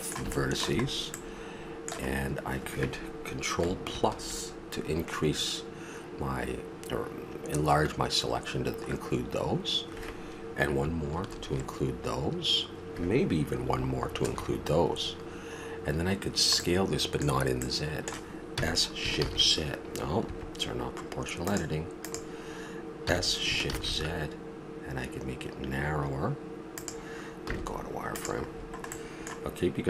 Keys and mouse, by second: 2.2-3.9 middle drag, 3.9 ctrl+KP_Add, 8.8 middle click, 9.8 middle click, 11.1 ctrl+KP_Add, 14.1 ctrl+KP_Add, 15.3-16.3 middle drag, 18.0 middle click, 18.5 s, 21.4 click, 23.0 s, 27.5 z, 28.5 middle click.